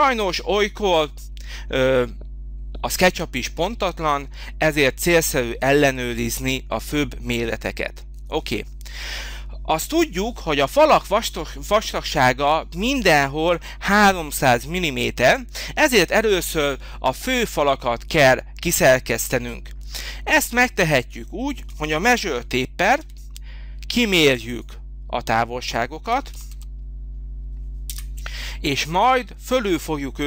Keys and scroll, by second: 23.0 t, 26.1 3, 26.4 0, 27.8 Return.